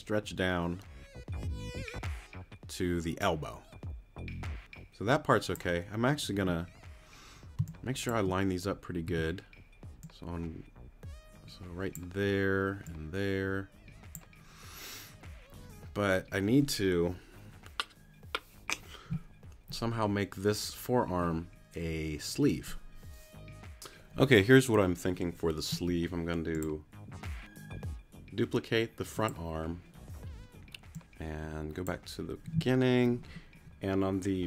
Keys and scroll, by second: 7.6 space, 9.1 t.